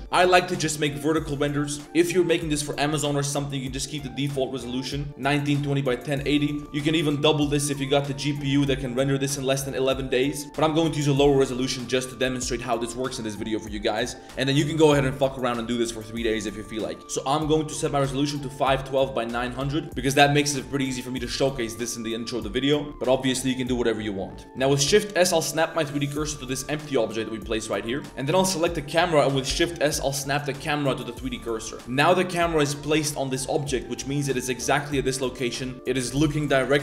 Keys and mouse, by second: 5.4 click, 6.0 click, 6.5 click, 7.7-9.1 drag, 10.4-18.5 drag, 18.6-19.8 drag, 24.4 ctrl+z, 24.5 click, 24.8 shift+s, 27.9 click, 28.6 click, 31.9 click, 33.3 middle drag, 33.8-34.2 middle drag, 34.8 middle click, 35.3 middle click, 35.7 middle click.